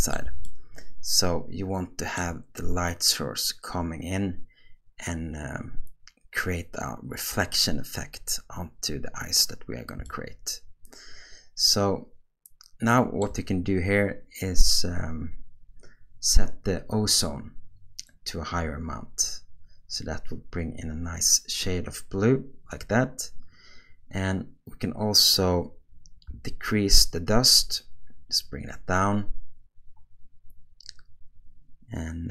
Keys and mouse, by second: 0.5-2.2 shift+middle drag, 10.1-13.2 shift+middle drag, 18.1-22.7 drag, 26.6-32.3 shift+drag.